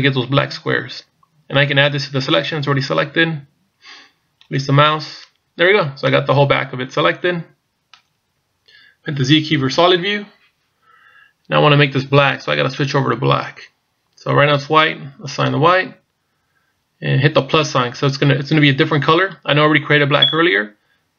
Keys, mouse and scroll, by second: 6.1 middle click, 11.3 z, 15.3 click.